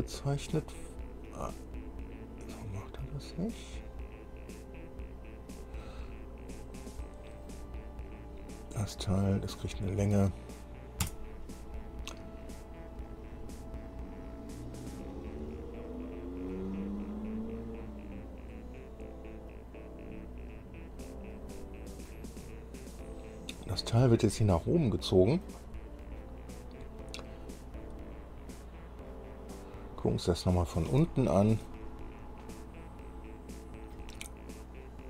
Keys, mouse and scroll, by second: 7.1 click, 8.3 click, 9.8 click, 11.2 Return, 13.3-19.9 drag, 20.2-20.6 scroll down 1, 21.6 click, 22.6-23.0 scroll down 1, 23.2-25.8 drag, 29.8-31.2 drag, 31.2 shift+middle click, 31.5 shift+click, 32.1 shift+middle click, 32.4-34.4 drag.